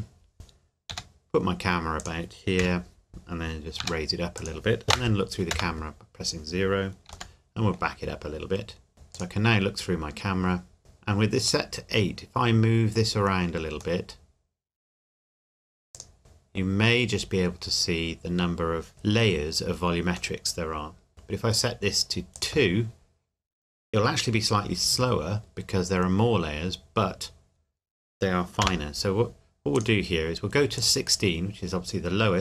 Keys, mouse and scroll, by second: 0.9 g, 2.0 click, 2.6 KP_1, 3.8 g, 4.3 click, 5.5 KP_0, 7.1 g, 7.3 middle click, 8.9 scroll up 1, 9.1 click, 9.5 click, 11.7 middle click, 13.2 scroll up 1, 14.0 middle click, 15.9 click, 16.2 middle click, 16.6 scroll down 1, 20.3 middle click, 21.5 click, 25.5-27.5 scroll up 1, 28.6 KP_0, 29.7 click.